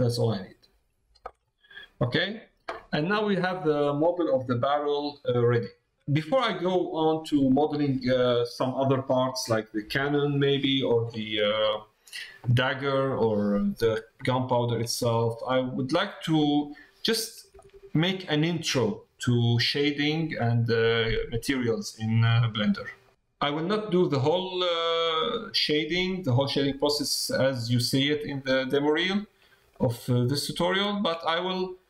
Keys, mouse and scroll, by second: 1.5 middle click, 2.2 middle click, 4.7 middle click, 13.0 middle click, 14.2 shift+middle click, 15.0-16.6 middle drag, 17.5 shift+middle click, 18.2 middle click, 23.0 middle click, 24.7 middle click, 29.0 middle click, 29.7 shift+middle click, 30.7 shift+middle click, 31.3 middle click.